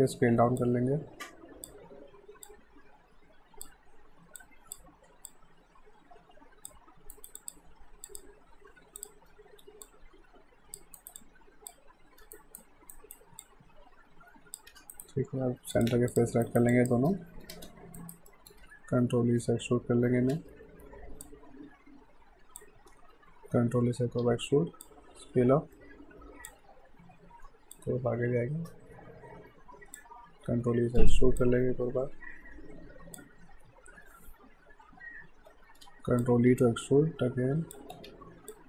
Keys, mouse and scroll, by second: 0.6 click, 4.4 alt+click, 7.1 right click, 7.4 click, 9.0 click, 11.0 alt+right click, 11.2 alt+click, 12.3 alt+right click, 13.4 alt+click, 14.7 q, 14.9 right click, 15.7 click, 16.1 shift+click, 16.4 alt+right click, 16.7 alt+click, 17.1 space, 18.0 alt+right click, 18.3 alt+middle click, 19.2 e, 21.2 click, 23.5 e, 24.8 click, 27.5 w, 27.7 click, 30.5 e, 31.4 click, 35.5 e, 36.2 click, 37.9 r, 38.5 click.